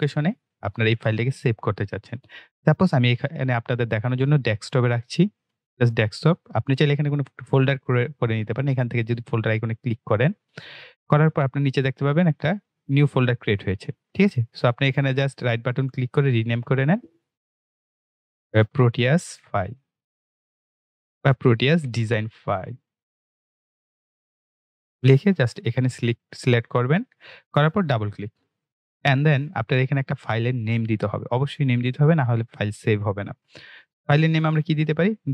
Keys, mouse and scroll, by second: 5.0-9.2 drag, 9.5 click, 11.1-13.0 scroll down 1, 14.8 right click, 16.2 click, 18.4-25.2 typing, 26.1 click, 32.5 click.